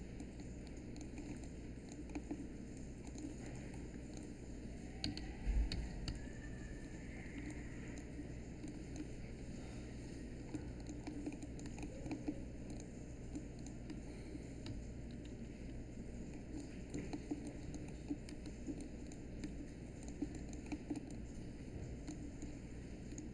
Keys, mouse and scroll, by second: 5.0 z, 7.2 space, 14.6 z.